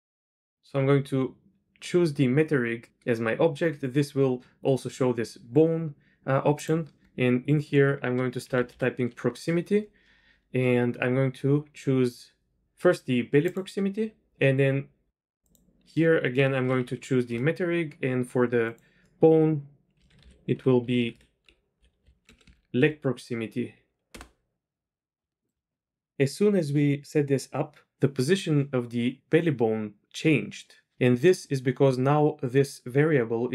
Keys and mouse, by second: 6.7-13.6 drag, 15.6-17.6 drag, 18.6-22.0 drag, 20.9 BackSpace, 21.1 BackSpace, 24.2 click, 25.2 KP_2, 25.2 KP_3.